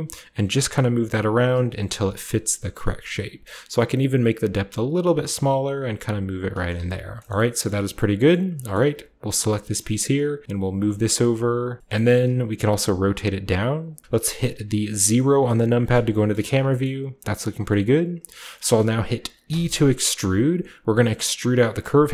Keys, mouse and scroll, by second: 1.3 shift+click, 2.0 g, 2.5 click, 4.2-6.5 drag, 5.2 g, 6.6-7.8 shift+drag, 6.7 z, 6.9-7.8 scroll down 1, 7.8 middle click, 7.8-8.3 scroll up 1, 8.3 middle click, 8.3 scroll down 1, 8.7-10.0 middle drag, 9.3 right click, 9.4-10.0 typing, 10.7-12.5 drag, 11.2 typing, 11.8 scroll down 1, 11.9-13.8 scroll up 1, 12.1 middle click, 12.5-12.9 typing, 12.9-15.3 drag, 15.3 KP_0, 16.3 shift+middle click, 16.5-17.5 shift+scroll down 1, 16.8 shift+middle click, 17.5-18.3 shift+scroll down 1, 18.3 shift+middle click, 18.3-19.4 scroll down 1, 18.7 middle click, 19.4 e, 22.0 click.